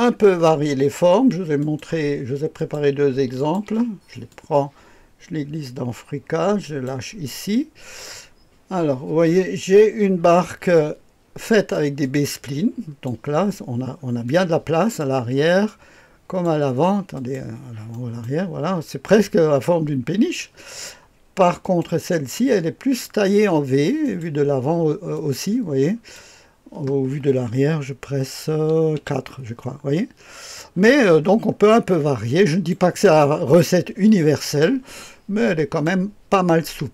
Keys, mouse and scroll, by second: 1.5 click, 2.5 click, 3.3 ctrl+click, 4.2-6.8 drag, 10.7-13.0 drag, 14.2-15.4 drag, 15.6 click, 17.1 click, 17.9 click, 17.9-18.2 right drag, 21.6 click, 22.1-23.0 drag, 24.0 click, 25.1-26.1 drag, 28.9 KP_4, 31.2-31.6 scroll down 1, 31.6-36.9 drag.